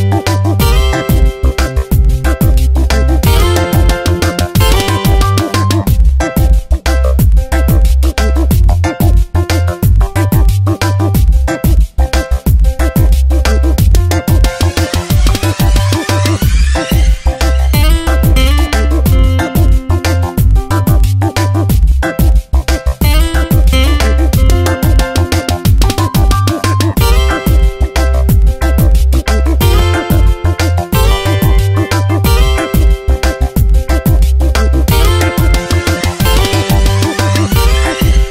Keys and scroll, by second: 1.2 ctrl+z, 5.5 space, 8.2 space, 14.5 ctrl+z, 15.5 v, 16.3 Tab, 16.9 space, 18.3 Tab, 20.2 ctrl+z, 24.2 ctrl+z, 25.3 alt+j, 27.3 ctrl+shift+], 28.2 ctrl+z, 29.2 ctrl+j, 29.9 ctrl+shift+[, 32.0 ctrl+shift+], 33.0 2.